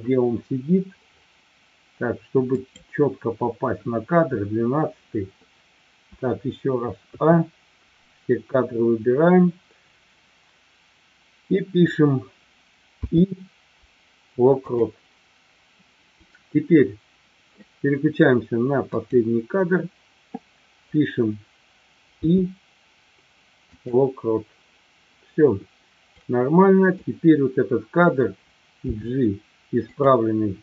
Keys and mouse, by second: 3.3-4.0 drag, 7.2 a, 19.7-20.4 drag, 26.0-27.0 drag, 29.2 g.